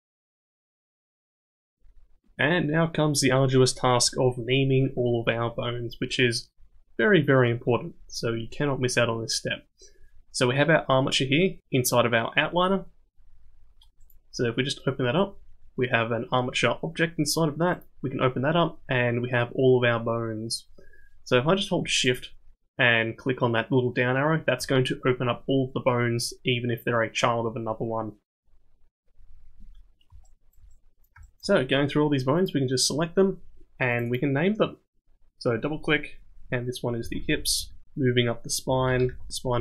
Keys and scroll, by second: 0.2 g, 0.5 g.